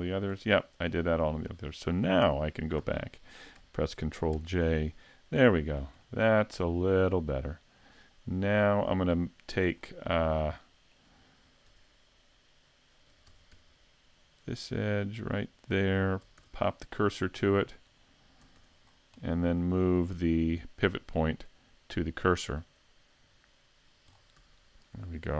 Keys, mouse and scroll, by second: 0.2-0.6 scroll down 2, 0.6 middle click, 1.8 shift+middle click, 2.2 a, 2.8 a, 4.3 ctrl+j, 5.5 shift+middle click, 6.0 middle click, 9.1 middle click, 9.8 scroll up 3, 10.4 middle click, 11.7 Tab, 13.4 ctrl+Tab, 14.4 right click, 15.3 right click, 16.4 shift+s, 18.4 a, 18.6 Tab, 18.9 scroll down 3, 19.2 middle click, 21.5 click, 24.2 scroll down 2, 24.4 a, 25.0 scroll down 1.